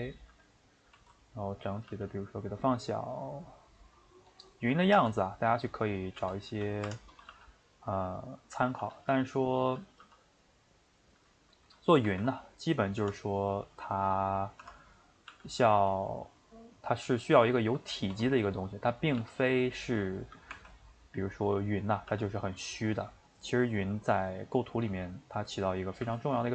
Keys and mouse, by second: 0.3 a, 0.9 s, 4.3 click, 4.9 g, 6.2 g, 7.1 click, 7.3 g, 8.8 g, 10.6-12.0 middle drag, 12.0 ctrl+r, 15.0 click, 15.3 g, 16.5 middle click, 17.2 a, 18.1 s, 20.5 r, 22.1 g, 23.5-24.8 shift+middle drag, 24.8 click, 25.6 click, 26.0 g.